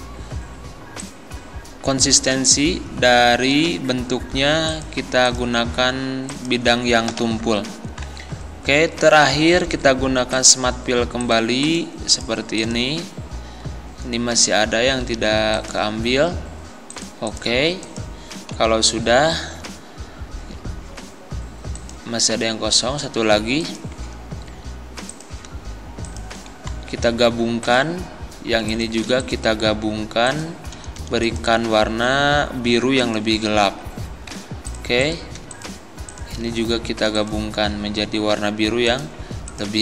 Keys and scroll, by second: 7.1 Delete, 18.6 Delete.